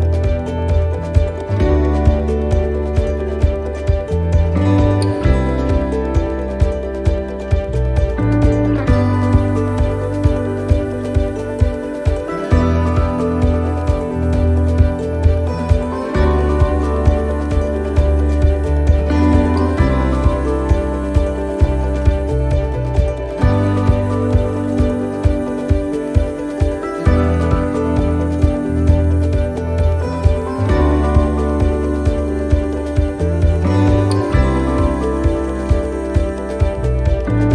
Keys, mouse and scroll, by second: 0.1 shift+middle click, 1.4 scroll down 1, 1.7 shift+middle click, 2.2-2.5 scroll up 2, 2.5 middle click, 3.1 shift+middle click, 3.7 scroll down 1, 4.5 click, 6.0 click, 12.7 shift+middle click, 12.9 scroll down 1, 15.0 scroll up 2, 15.4 shift+middle click, 16.1 s, 17.2 middle click, 17.9 shift+middle click, 19.0 s, 20.1 middle click, 21.3 click, 23.7 middle click, 24.0-24.4 scroll down 2, 24.6 shift+middle click, 27.4-27.8 scroll up 3, 27.8 shift+middle click, 29.9 click, 30.9 right click, 31.3 alt+shift+right click, 32.2 s, 34.2 click, 35.6 middle click, 35.8 scroll down 2, 36.3 shift+middle click.